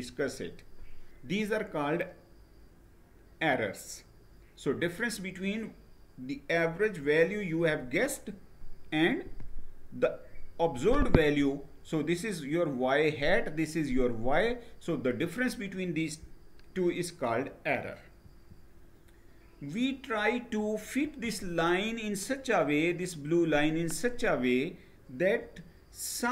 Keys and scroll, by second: 17.9 Down, 20.6 Up.